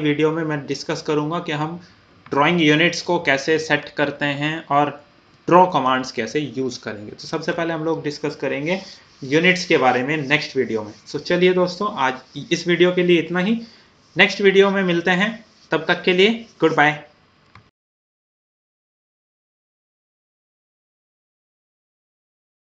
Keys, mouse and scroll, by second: 2.8 scroll down 1, 4.4 typing, 5.8-8.5 middle drag.